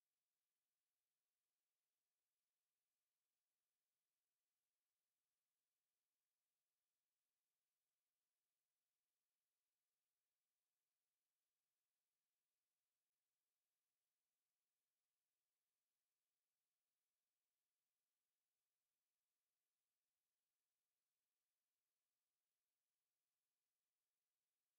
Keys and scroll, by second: 23.8 Escape.